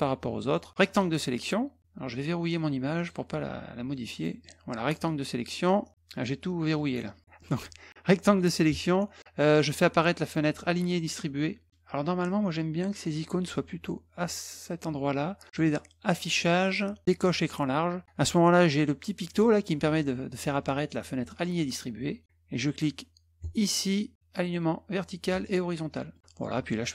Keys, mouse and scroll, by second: 0.5 click, 0.9 click, 3.0 click, 4.2 click, 4.4-5.4 drag, 6.8 click, 7.4 click, 15.5 click, 16.6 click, 21.3 click, 23.4 click, 25.3 click, 26.1 click.